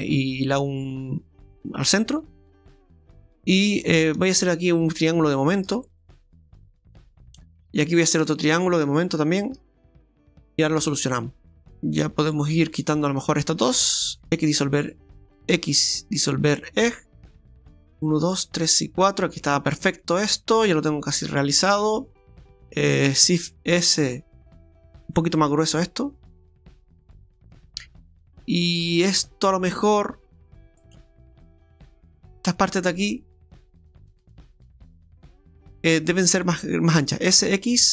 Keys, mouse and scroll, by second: 4.2 shift+right click, 5.0 shift+right click, 6.8 shift+right click, 7.9 right click, 8.5 shift+right click, 9.4 right click, 10.3 f, 10.7-11.6 scroll down 8, 11.6 scroll up 8, 11.7 click, 12.7 right click, 13.4 shift+right click, 14.3 x, 15.6 x, 17.1 middle click, 17.1 scroll down 2, 19.3-19.9 scroll down 1, 19.9 scroll down 1, 20.0 middle click, 22.4 alt+shift+right click, 22.4-23.1 scroll up 3, 23.5 shift+s, 25.0 s, 28.4 right click, 30.0 right click, 31.5 shift+right click, 31.5 shift+right click, 32.5 right click, 33.4 shift+right click, 37.3 s.